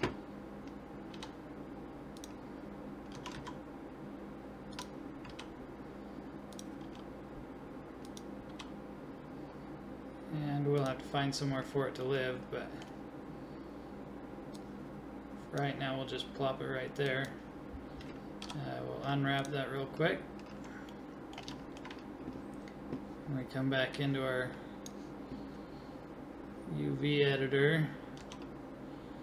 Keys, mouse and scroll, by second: 1.1 g, 3.1 s, 5.3 g, 6.9 s, 8.5 g, 18.4 u, 20.9-24.0 middle drag, 24.0 click, 24.1 click, 24.6 click, 28.2 s.